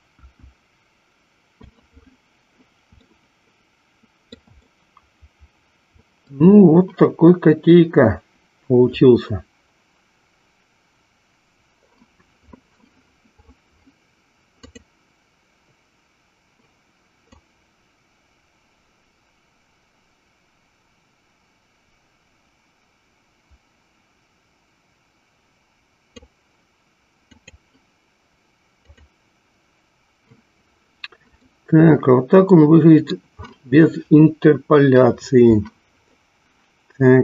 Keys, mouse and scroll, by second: 0.4 KP_1, 3.3-4.6 shift+middle drag, 4.8-6.6 middle drag, 15.1 click, 17.2-26.5 drag, 28.1 click, 29.2 click, 31.6-33.4 middle drag.